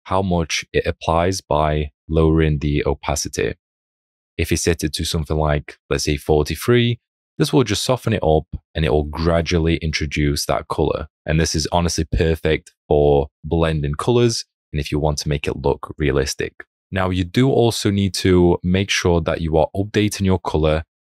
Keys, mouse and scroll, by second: 20.6 alt+click.